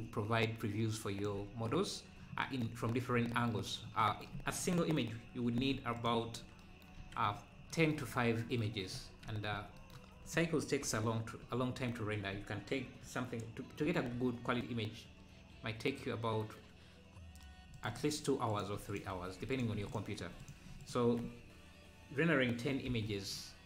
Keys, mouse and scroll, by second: 0.4-1.7 shift+drag, 1.8 scroll down 3, 5.6 ctrl+a, 6.4 scroll down 1, 7.0 ctrl+s, 8.1 scroll up 4, 8.9 Tab, 10.8 KP_Decimal, 11.5 scroll down 3, 12.3-12.8 scroll down 1, 13.8 ctrl+shift+b, 18.5-22.9 drag, 22.9 m.